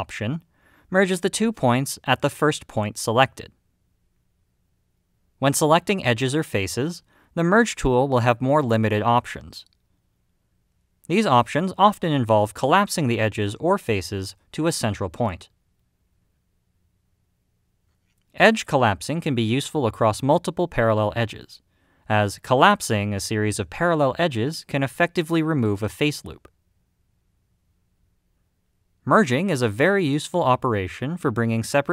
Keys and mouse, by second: 0.0 click, 7.0 click, 9.9 click, 13.2 m, 16.9-18.3 middle drag, 19.0 click, 19.5 middle click, 21.9 middle click, 23.6-24.5 middle drag, 25.1 m, 27.6 m, 29.3-31.9 middle drag.